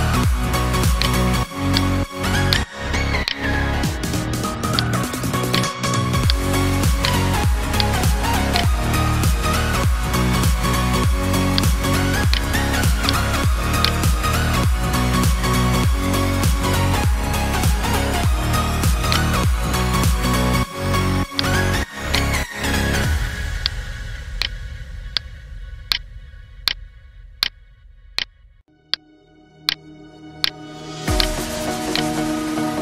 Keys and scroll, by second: 1.9 ctrl+space, 2.4 ctrl+space, 16.4 space.